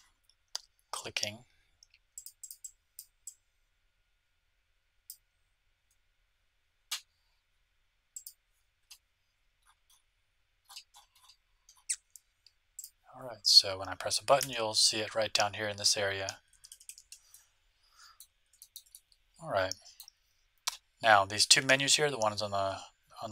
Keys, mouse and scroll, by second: 4.0-5.1 drag, 8.1-9.8 drag, 9.3-10.6 scroll up 1, 10.6-11.9 middle drag, 11.9-12.7 scroll down 1, 12.7-14.3 drag, 12.7-13.5 scroll down 1, 13.5-15.5 middle drag, 14.4 a, 16.5 a, 16.6 a, 16.8 a, 17.3-20.8 middle drag.